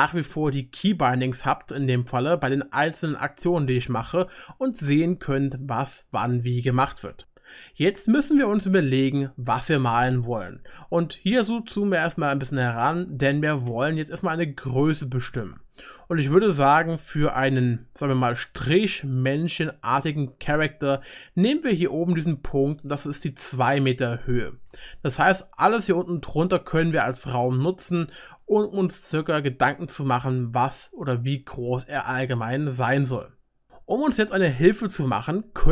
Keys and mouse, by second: 0.8 click, 0.8 right click, 6.8-11.6 drag, 6.8-19.2 middle drag, 6.8-11.6 right drag, 19.2 shift+middle click, 19.6 shift+middle click, 19.8 shift+click, 19.8 shift+middle click, 19.8 shift+right click, 20.2 shift+click, 20.2 shift+middle click, 20.2 shift+right click, 20.5-35.7 middle drag, 26.1-35.7 drag, 26.1-35.7 right drag.